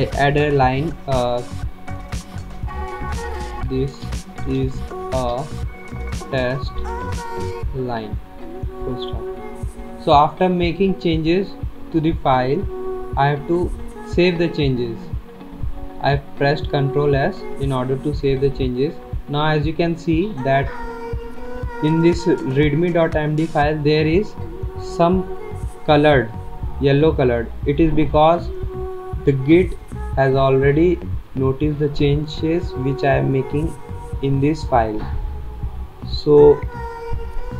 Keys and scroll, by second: 3.3-9.0 typing, 14.0 ctrl+s, 17.0 ctrl+s.